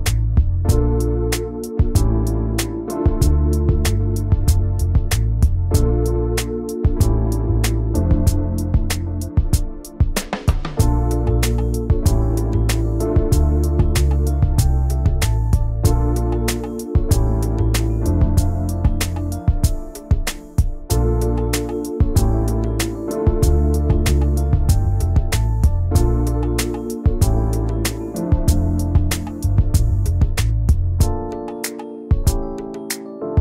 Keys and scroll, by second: 2.7 ctrl+g, 22.9 ctrl+g, 23.3 ctrl+g, 26.0 Delete, 28.1 t, 29.9-32.5 typing.